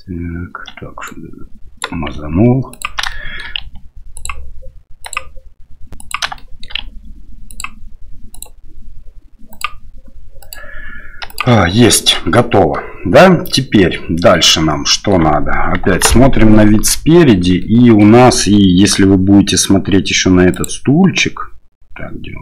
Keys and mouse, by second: 1.1 right click, 2.8 ctrl+click, 3.1 shift+middle click, 4.1 ctrl+click, 5.0 ctrl+click, 5.9 ctrl+click, 6.4 shift+middle click, 7.5-9.6 ctrl+drag, 10.4 ctrl+click, 12.7 middle click, 14.3 middle click, 15.8 KP_1, 17.6 middle click.